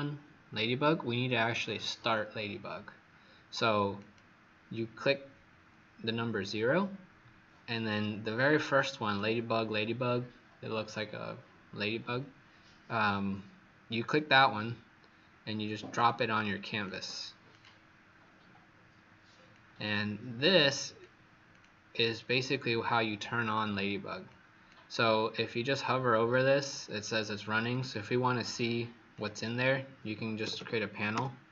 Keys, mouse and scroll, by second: 17.5 click, 19.5 click, 29.3 click, 30.4 typing, 31.1 Return.